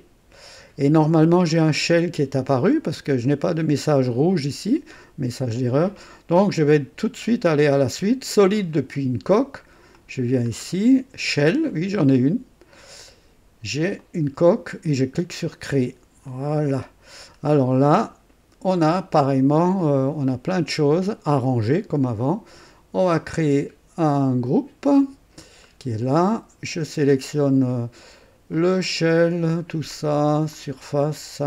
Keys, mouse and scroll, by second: 8.5 click, 9.9 click, 10.5-10.8 scroll down 1, 11.7 click, 13.9 click, 15.3 click, 16.3 click, 17.2-17.5 scroll down 2, 18.1 scroll up 2, 24.4 click, 25.5 scroll down 2, 28.5 click, 29.5 ctrl+click, 29.9 ctrl+click, 30.5 ctrl+click, 31.0 ctrl+click.